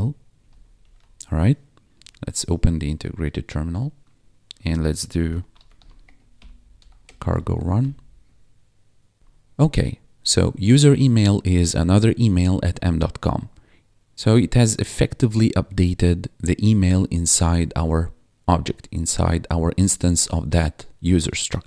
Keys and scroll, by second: 0.4 ;, 0.7 ctrl+s, 1.8 ctrl+`, 4.9-7.8 typing, 9.2 1, 13.5 1, 14.1 ctrl+`.